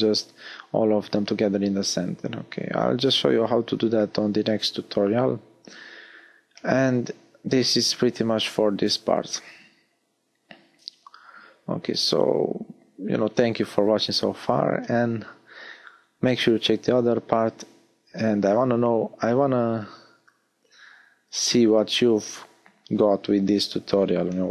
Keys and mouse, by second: 0.1 s, 2.9 s, 4.3 click, 10.5 a, 11.1 z.